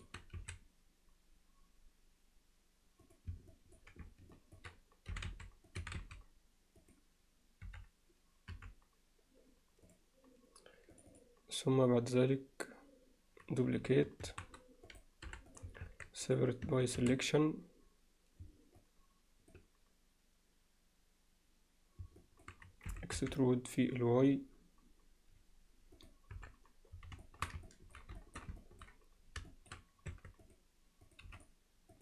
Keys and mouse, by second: 3.5 alt+middle click, 4.4 ctrl+alt+middle click, 5.8 e, 7.7 f, 11.0 click, 14.3 shift+d, 15.3 p, 15.9 Tab, 16.3 click, 16.7 Tab, 17.0 a, 18.8 middle click, 22.2 middle click, 26.3 KP_7, 27.2 alt+shift+middle click, 27.7 ctrl+alt+middle drag, 28.2 alt+shift+middle drag, 28.6 ctrl+middle click, 29.5 alt+shift+middle click, 30.1 Tab, 30.5 click, 31.1 click, 31.3 x, 31.9 click.